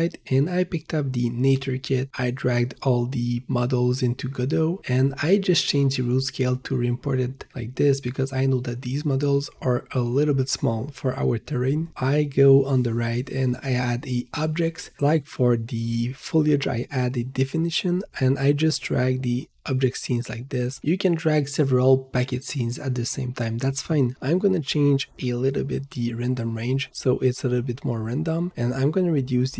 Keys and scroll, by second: 2.6 alt+Tab, 7.4-8.4 typing, 26.1 3, 26.3 Return.